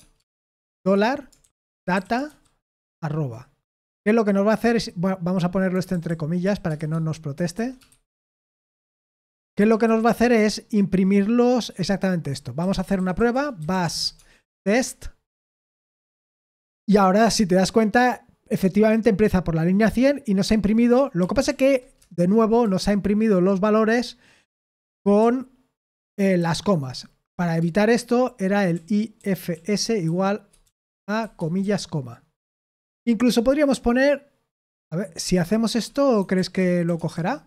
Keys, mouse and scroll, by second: 0.0-2.8 typing, 3.6 Escape, 4.8-10.4 typing, 7.4 Delete, 7.6 Escape, 12.6-15.0 typing, 15.3 Return, 21.2 ctrl+p, 21.5 ctrl+p, 22.0 Return, 22.6-23.4 typing, 26.0-27.3 typing, 28.5-31.6 typing, 35.9-37.4 typing.